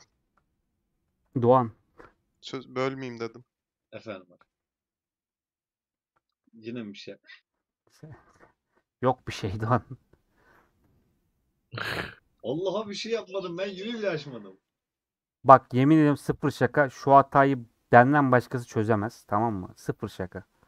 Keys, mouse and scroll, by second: 12.1-12.5 scroll down 2, 12.5-14.5 middle drag, 14.5 Tab, 14.6-16.3 drag, 20.5 scroll up 3.